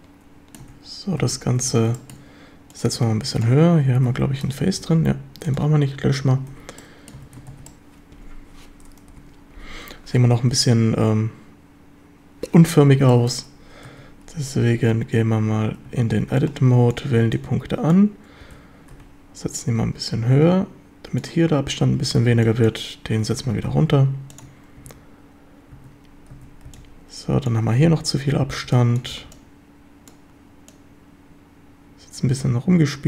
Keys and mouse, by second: 1.2 a, 1.6 a, 2.0 shift+drag, 2.7 click, 4.1 3, 4.8 x, 6.6 Tab, 6.8-7.2 drag, 7.2 a, 7.5 ctrl+s, 7.7 click, 9.1 KP_7, 13.1 shift+drag, 13.9 Tab, 14.8-17.2 typing, 18.4 g, 19.0 Escape, 19.6-21.2 drag, 22.1 a, 22.3 b, 23.3 g, 23.7 y, 24.4 ctrl+click, 24.8 a, 25.8 a, 26.7 a, 26.7 b, 28.5 b, 29.5 b, 30.7-33.0 drag.